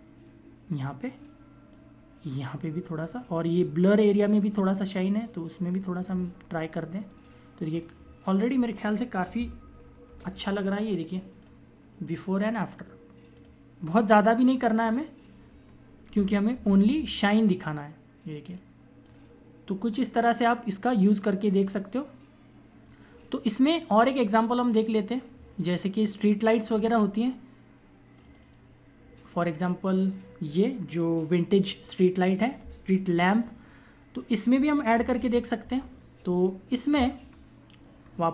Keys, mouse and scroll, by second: 6.2 ], 7.0 click, 9.6 ctrl+=, 10.7 click, 15.7 ctrl+-, 16.4 ctrl+=, 16.9 click, 23.8 click, 25.7-26.3 scroll down 1, 35.0 ctrl+=, 37.1 scroll up 1.